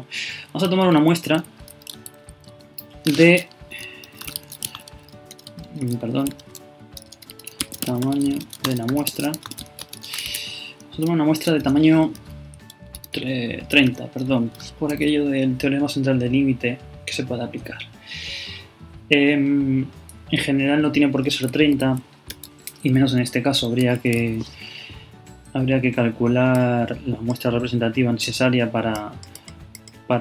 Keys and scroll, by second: 1.0 super+Up, 1.1 super+Left, 1.4 super+Up, 2.0 super+Left, 6.3 alt+BackSpace, 9.6 shift+space, 9.7 shift+0, 9.8 shift+space.